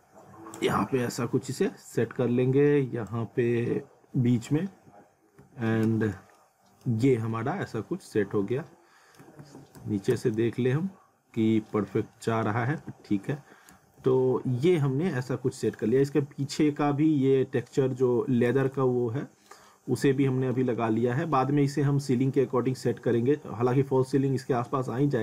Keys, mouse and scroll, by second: 0.8 scroll down 1, 1.1 middle click, 1.7 scroll up 1, 3.1 click, 4.9 alt+w, 5.8 z, 6.4 alt+middle click, 7.0 scroll up 1, 7.3 alt+middle click, 8.3 scroll down 1, 8.5 alt+middle click, 9.2-10.1 typing, 11.0 scroll up 1, 11.7 middle click, 12.4 scroll up 1, 12.9 alt+w, 13.7 z, 14.1 alt+middle click, 15.1 alt+middle click, 16.0 alt+middle click, 16.7-17.2 scroll up 1, 18.5 z, 18.8 alt+middle click, 20.3 alt+middle click, 20.8 alt+middle click, 25.0 alt+middle click.